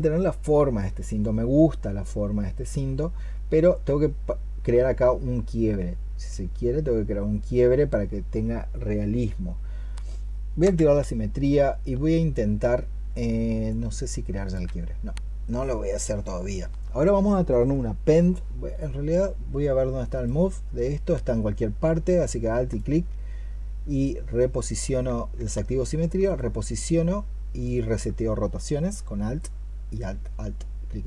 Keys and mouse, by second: 10.5 x, 22.5 alt+click, 25.2 x, 26.1 alt+click, 27.5 alt+click.